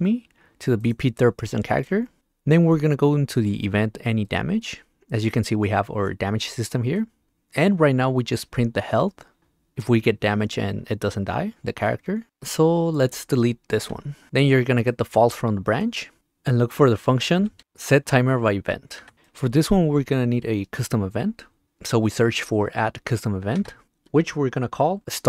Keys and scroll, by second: 17.6 Up, 19.0 Return, 23.8 Return, 25.0 n.